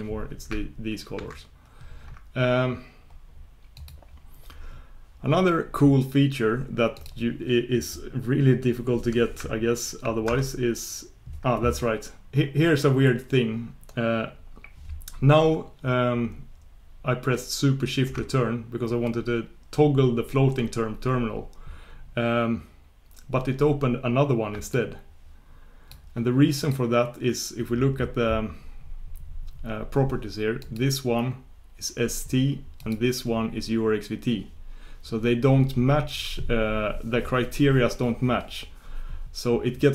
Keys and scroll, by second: 1.2 shift+super+q, 10.2 shift+super+Return, 10.4 shift+super+Return, 26.6 shift+super+Return.